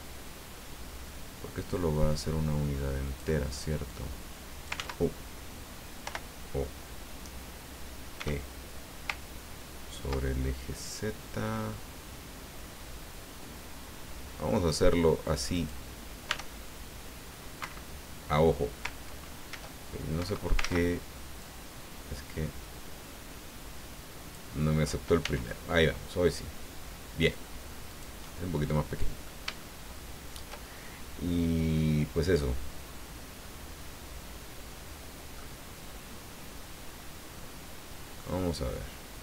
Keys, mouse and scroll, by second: 3.9 click, 4.8 ctrl+z, 6.0 o, 8.2 e, 16.2 e, 17.6 Escape, 19.5 ctrl+e, 20.2 Escape, 20.6 ctrl+z, 21.4-24.5 drag, 25.2 e, 27.9 click, 28.2-29.4 middle drag, 29.6 shift+middle click, 35.3 middle click, 38.2-39.2 middle drag.